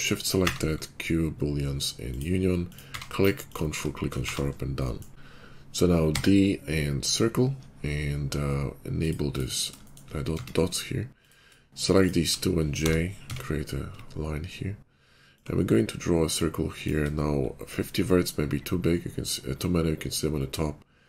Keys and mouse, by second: 0.3 q, 2.6 click, 2.8 q, 4.2 shift+2, 5.1 Tab, 5.1 ctrl+z, 6.0 d, 8.9 click, 9.1 click, 9.6-11.1 shift+middle drag, 10.2 Tab, 11.1 click, 11.1-15.3 shift+middle drag, 12.6 j, 13.1 Tab, 15.3-15.7 ctrl+drag, 16.2-21.0 drag.